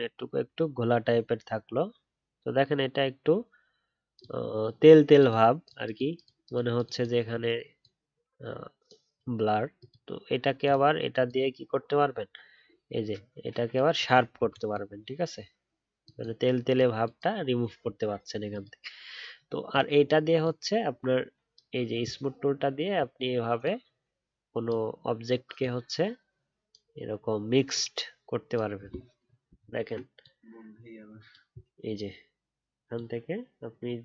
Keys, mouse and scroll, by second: 29.5 alt+scroll down 1.